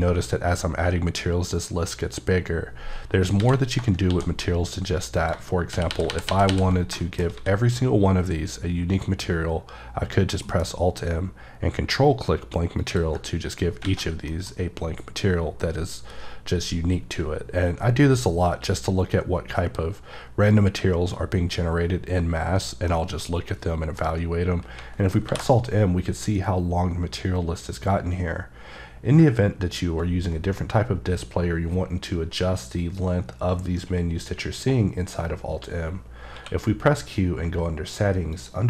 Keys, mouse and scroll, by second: 3.1-3.4 scroll down 1, 3.4 a, 3.6 scroll down 2, 4.1 shift+d, 5.2 click, 5.7 shift+r, 6.5 r, 6.7 scroll down 2, 6.9 middle click, 7.3 a, 10.4 a, 10.4 alt+m, 12.8 ctrl+click, 13.5-13.8 scroll up 3, 13.8 a, 13.9-14.2 scroll down 2, 14.3 middle click, 22.9 middle click, 25.2 m, 36.3 q, 38.3 click.